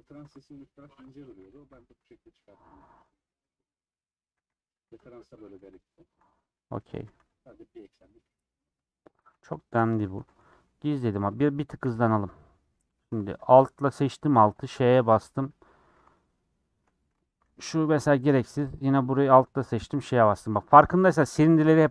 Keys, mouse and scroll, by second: 0.1 3, 1.7 ;, 2.1-4.2 middle drag, 4.2 a, 4.4 u, 5.8 Left, 6.6 Left, 6.9 a, 7.1 u, 9.1-9.7 scroll down 2, 9.7 /, 10.1 Tab, 10.3 h, 10.7 scroll up 2, 11.0 click, 11.8 /, 12.1 middle click, 12.6 Tab, 12.8 middle click, 12.9 3, 14.4 ;, 14.9 scroll down 1, 14.9 middle click, 15.4 scroll up 1, 15.8 3, 16.9 2, 17.8 ctrl+x, 18.3 3, 18.8 Left, 19.9 ;, 20.4-20.9 scroll down 3, 20.4 middle click.